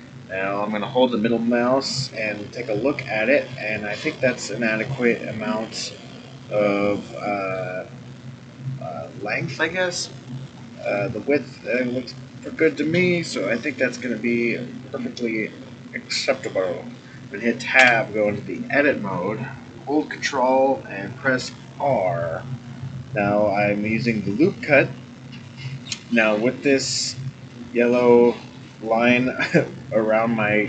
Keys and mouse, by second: 2.1-7.5 middle drag, 10.0-10.8 middle drag, 11.7-14.9 middle drag, 15.4-16.9 middle drag, 17.8 Tab, 21.2 ctrl+r.